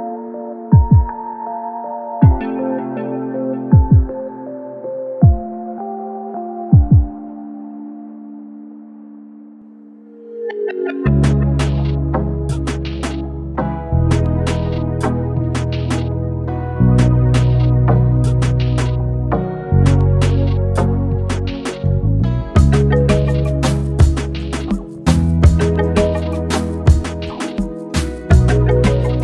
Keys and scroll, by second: 14.2 1, 15.7-16.4 typing.